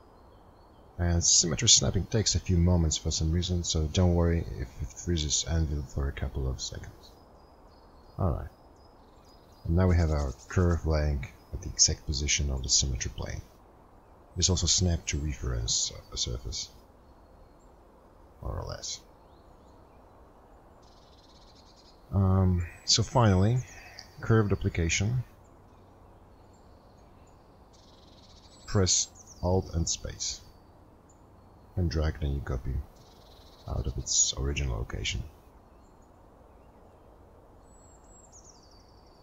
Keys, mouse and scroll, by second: 0.7 space, 33.6 alt+space.